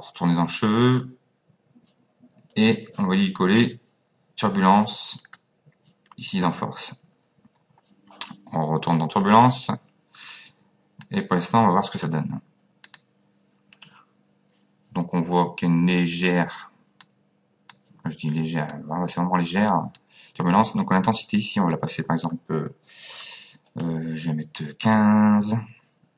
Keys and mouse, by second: 0.5 click, 3.6 click, 9.2 click, 11.0 click, 12.9 click, 16.0 click, 17.7 click, 19.6 click, 21.7 click, 23.0 KP_1, 23.7 KP_5, 24.8 click.